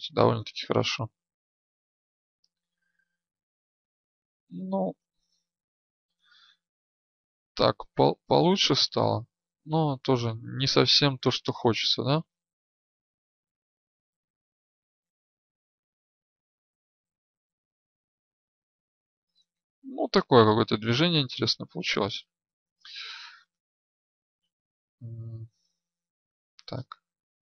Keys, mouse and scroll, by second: 0.6-9.1 drag, 1.5 right click, 22.3 ctrl+z, 26.5 right click.